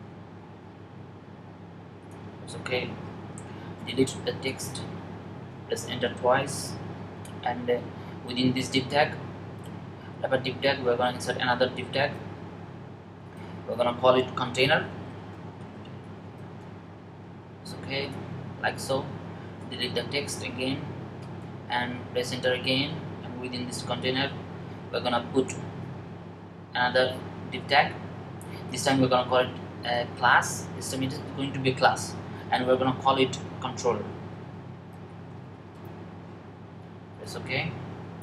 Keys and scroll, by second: 2.3 typing, 6.2 Up, 14.4-16.9 typing, 23.4 Up, 33.4-36.0 typing.